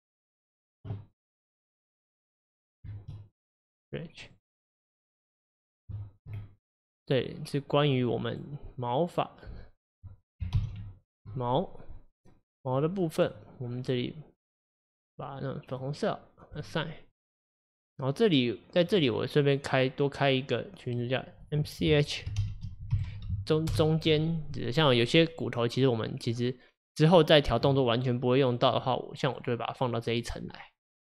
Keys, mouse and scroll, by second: 1.9-3.9 drag, 4.3 click, 5.4 click, 6.0-6.4 shift+middle drag, 6.4-6.9 scroll up 1, 6.9-8.0 middle drag, 8.0 click, 12.8 drag, 14.7-17.2 drag, 18.9 drag, 21.0-24.1 drag, 24.8 click, 25.1 click, 25.8 click, 28.6 click, 29.3-30.3 drag.